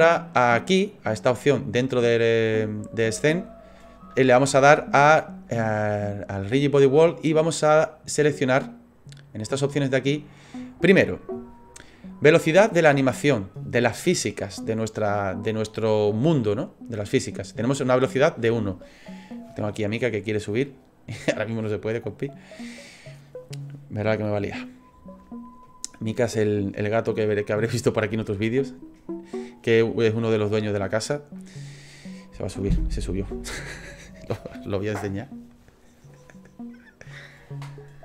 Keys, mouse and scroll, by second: 7.4 click.